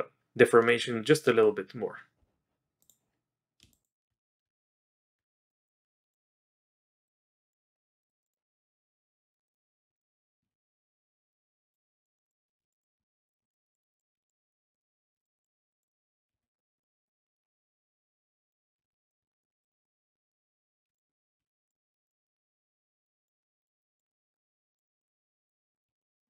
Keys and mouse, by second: 0.6 click, 1.2 click, 2.8 click, 4.4 Tab, 5.5 click, 6.5 click, 7.0 click, 7.5 click, 8.0 click, 8.2 click, 8.7 click, 9.5 click, 9.9 click, 9.9 d, 10.5 ctrl+z, 12.0 click, 12.2 click, 12.7 click, 12.7 b, 13.4 click, 13.9 click, 14.2 click, 14.2 d, 14.4 click, 14.7 click, 15.1 b, 15.2 click, 15.7 click, 15.9 click, 16.6 click, 16.6 z, 16.8 click, 17.2 click, 17.8 click, 18.7 z, 19.2 click, 19.6 click, 19.8 click, 20.3 click, 20.9 d, 21.1 click, 21.7 ctrl+z, 21.7 click, 21.8 click, 22.0 click, 22.2 click, 22.4 click, 23.0 click, 23.6 click, 23.8 click, 23.9 click, 24.1 click, 24.3 click, 24.7 click, 24.8 click, 25.0 click, 25.3 click, 25.7 click, 25.8 z, 26.0 click.